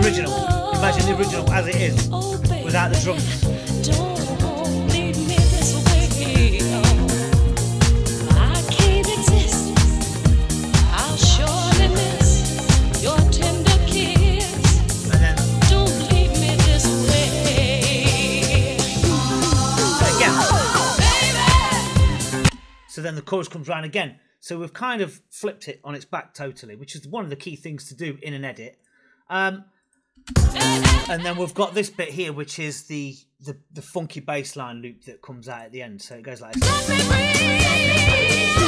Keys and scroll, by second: 22.3 space, 30.2 space, 36.4 space.